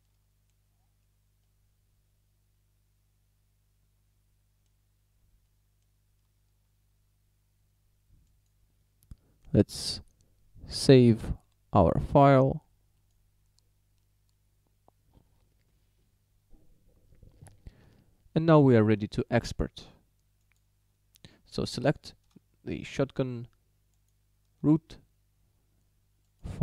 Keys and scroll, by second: 6.3 z.